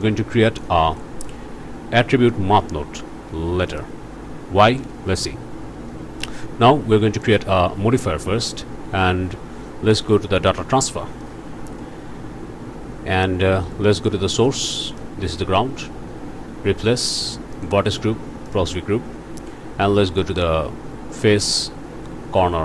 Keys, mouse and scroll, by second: 0.0 click, 1.0 click, 3.7 click, 7.2 click, 11.2 click, 14.0 click, 14.9 click, 17.6 click, 18.5 click.